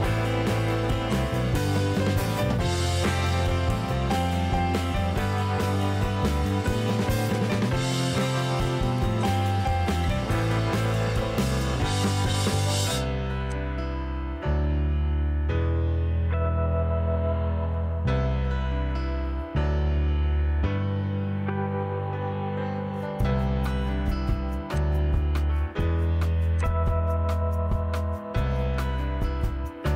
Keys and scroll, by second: 2.5 m, 11.2 Delete, 23.3 r, 28.9 p.